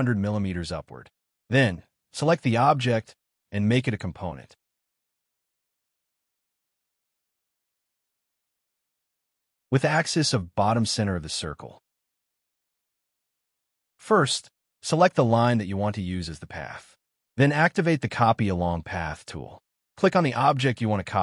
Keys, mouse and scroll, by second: 0.8 space, 1.8 scroll up 1, 2.5 right click, 5.5 scroll up 1, 5.9 middle click, 6.8 scroll up 1, 7.4 middle click, 8.8 k, 9.7 middle click, 9.9 scroll up 1, 11.9 double click, 12.9 scroll down 1, 13.6 k, 13.7 middle click, 13.9 scroll down 2, 14.0 space, 14.4 shift+middle click.